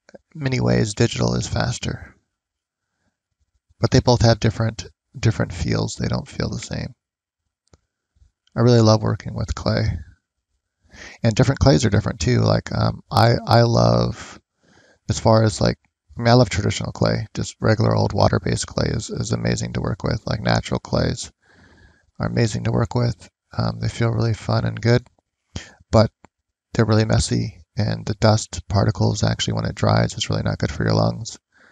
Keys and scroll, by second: 20.4 ctrl+z.